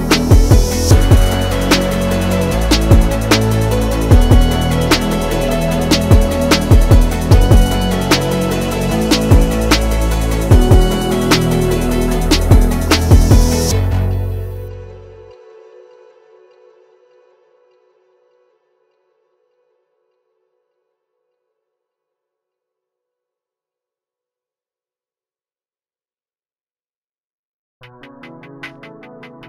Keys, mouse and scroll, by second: 0.4-2.3 alt+drag, 2.3-4.7 alt+drag, 6.4 Right, 7.1 click, 7.3 click, 8.0 Down, 8.5 click, 9.0 Left, 9.5 Down, 10.5 click, 11.8 Left, 12.4 click, 12.9 Up, 13.8 click, 14.4 Right, 14.8 Up, 15.3 Down, 17.6 shift+click, 20.4 shift+click, 21.9-27.2 shift+drag.